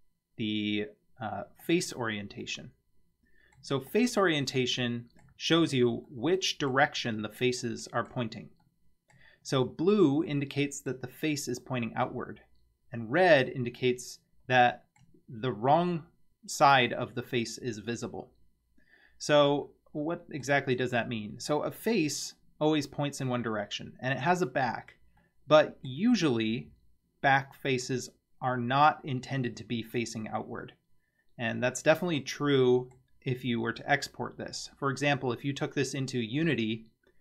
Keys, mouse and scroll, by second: 2.4-3.6 middle drag, 3.9 click, 4.5-5.3 middle drag, 5.6 Tab, 6.1-6.7 middle drag, 7.2-8.1 middle drag, 8.6-9.2 middle drag, 9.4 scroll up 3, 10.3-10.9 middle drag, 13.8-15.0 middle drag, 19.7-20.4 middle drag, 25.2-25.9 middle drag, 32.2 middle click.